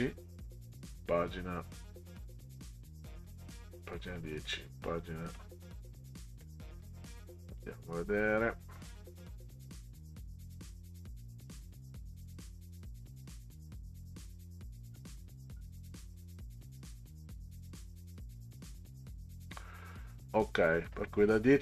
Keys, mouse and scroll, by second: 2.1 click, 4.2 click, 6.4-6.9 scroll up 4, 7.5 click, 14.9 scroll down 2, 15.5 scroll down 2, 16.2 scroll down 4, 18.4 scroll up 2, 21.5 scroll down 2.